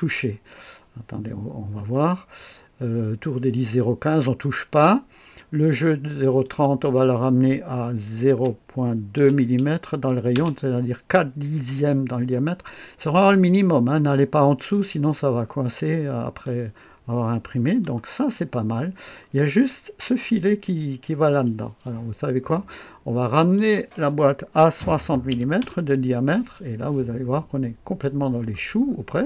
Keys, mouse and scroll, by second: 6.4 click, 8.3-9.2 typing, 10.4 Return, 15.4-16.1 scroll up 1, 16.1-17.9 scroll up 1, 16.5-18.3 right drag, 18.1-23.4 scroll down 1, 23.4 click, 24.9 KP_6, 25.3 KP_0, 25.6 Return, 28.9-29.2 scroll up 1.